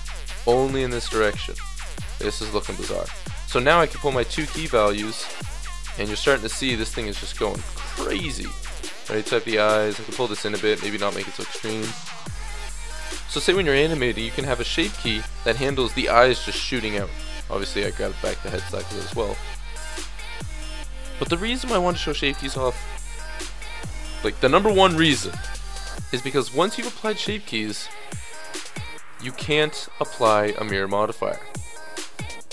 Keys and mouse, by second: 0.9 middle click, 1.3 middle click, 2.0 Tab, 7.4-11.3 drag, 11.3 middle drag, 12.4-14.6 middle drag, 14.6-17.3 drag, 17.7-20.6 middle drag, 20.6-26.1 drag, 26.1 middle click, 27.7-32.5 drag.